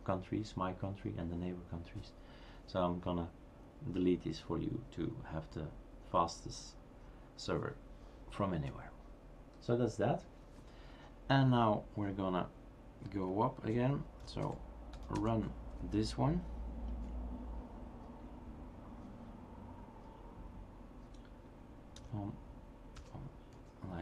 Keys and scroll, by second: 14.4 typing, 16.2 typing, 22.0 typing, 23.5 Tab, 23.5 typing.